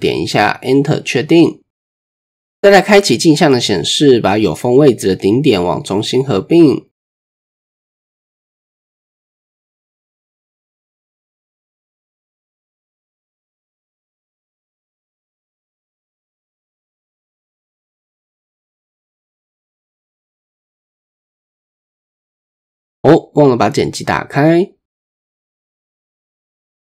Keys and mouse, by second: 2.4 shift+click, 2.9 middle click, 4.7 drag, 5.2 middle click, 6.3 shift+middle click, 8.7 click, 11.7 shift+click, 13.2 shift+middle click, 17.3 middle click, 18.1 shift+middle click, 18.7 middle click, 19.4 shift+click, 21.3 middle click, 22.0 shift+click, 23.0-24.8 drag, 25.7 click, 26.7-26.8 drag.